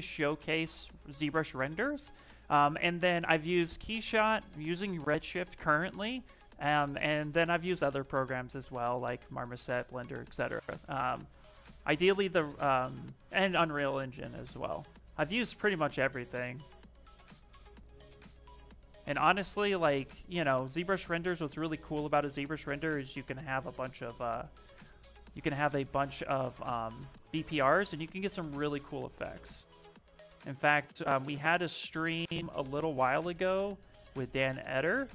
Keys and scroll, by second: 12.2 s, 16.9 b, 19.5 l, 23.4 s, 25.2 space, 27.4 v, 32.7 space.